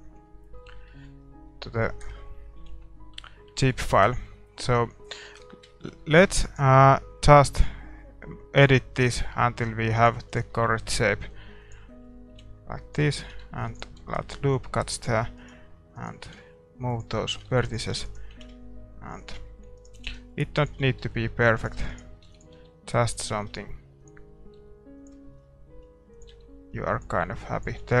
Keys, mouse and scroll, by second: 0.6-2.7 middle drag, 2.7-3.1 scroll down 1, 2.7 KP_5, 3.1-3.5 scroll up 1, 3.5-7.5 middle drag, 5.2 Tab, 6.0 a, 6.4-8.3 right drag, 7.5 g, 9.9-12.0 right drag, 10.6 g, 11.8-13.6 middle drag, 12.1 right click, 12.3 g, 13.1 a, 13.4 ctrl+r, 14.0 s, 15.2 a, 15.9-17.9 right drag, 16.2 g, 17.1 a, 17.4 ctrl+r, 17.9 a, 18.0-23.6 right drag, 18.3 g, 19.4 a, 20.0 g, 20.8 a, 21.0-23.2 middle drag, 22.2 e, 22.5 s, 23.2 g, 24.5 r, 25.2-27.4 middle drag, 25.7-28.0 typing.